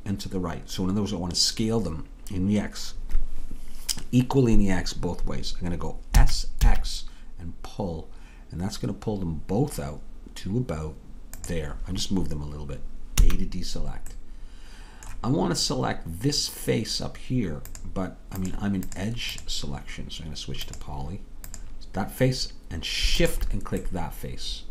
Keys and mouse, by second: 6.2 s, 13.2 a, 14.7 middle click, 14.9-16.8 middle drag, 19.4-24.0 drag, 24.0 middle click.